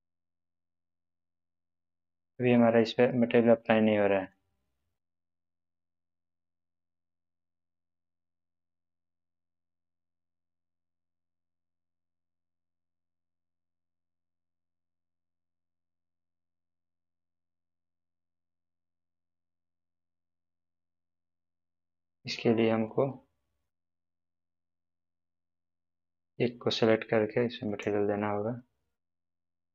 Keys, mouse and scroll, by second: 0.5 click, 1.4-2.9 middle drag, 3.0-3.4 scroll up 1, 3.7-4.3 middle drag, 8.0-11.1 drag, 15.1 click, 19.1-19.7 middle drag, 21.2 click, 21.8-22.3 scroll down 1, 22.9-23.8 middle click, 23.9-24.7 scroll down 1, 24.7-25.3 middle drag, 26.1-29.7 drag.